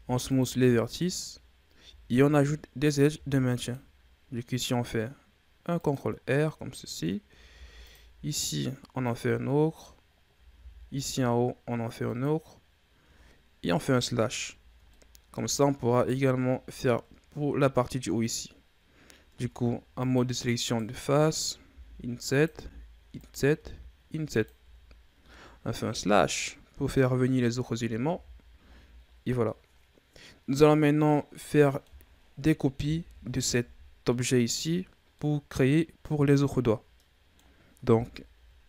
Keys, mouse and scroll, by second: 0.9-1.3 shift+scroll up 3, 1.7 Tab, 3.0 ctrl+r, 6.3-7.4 middle drag, 7.4 ctrl+r, 9.4 middle click, 9.9-10.4 scroll up 1, 10.4 ctrl+r, 13.6 KP_Divide, 14.8 middle click, 15.3-15.8 shift+scroll up 2, 15.8 right click, 19.2 ctrl+Tab, 20.5 right click, 21.6 i, 22.4 i, 24.5 Tab, 25.6 KP_Divide, 27.4 KP_1, 28.0 a, 28.6-29.6 scroll down 5, 29.6-30.4 scroll down 4, 30.4-31.2 scroll down 2, 31.2-32.1 middle drag, 32.1-32.9 scroll up 1, 32.9 KP_3, 33.9-34.6 middle drag, 34.6-35.1 scroll up 5, 35.1-36.6 middle drag, 36.6 scroll down 4, 36.9-38.2 middle drag, 38.2 KP_1.